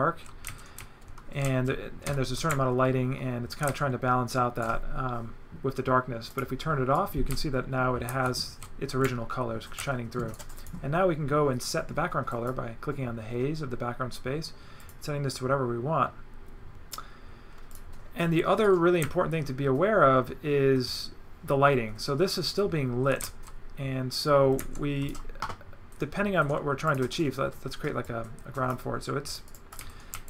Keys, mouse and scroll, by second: 1.4 right click, 1.7 right click, 6.3 click, 6.9 right click, 10.3 z, 10.6 click, 12.3 click, 14.8 click, 15.3 click, 17.7 click, 18.6 right click, 24.7 right click, 26.9 click, 28.1 click, 29.3 click, 29.5 right click, 30.1 right click.